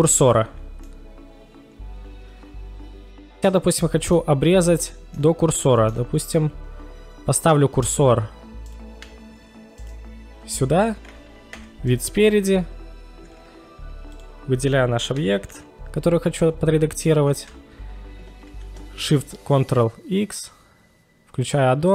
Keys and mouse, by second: 5.2 middle click, 5.5-6.0 middle drag, 8.6 right click, 9.8 shift+right click, 11.5 KP_1, 14.1 click, 17.3 ctrl+shift+x.